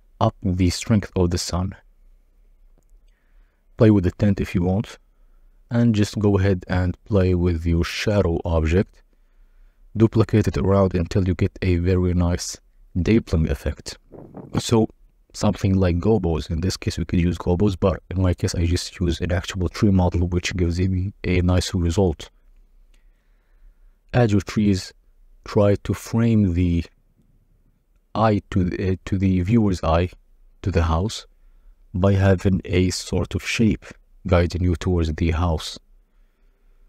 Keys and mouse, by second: 1.6 shift+click, 4.7 click, 5.5 s, 8.8 shift+d, 9.4 shift+z, 12.7 KP_0, 15.2-16.7 drag, 17.5 KP_0, 17.6 g, 18.6 alt+d, 22.2 click, 24.6-26.3 drag, 26.7 s, 27.3 KP_0, 27.3 g, 28.7 click, 29.5 alt+d, 32.4 alt+d, 33.5 click, 34.2 click, 34.4 r, 34.5 z, 36.3 g.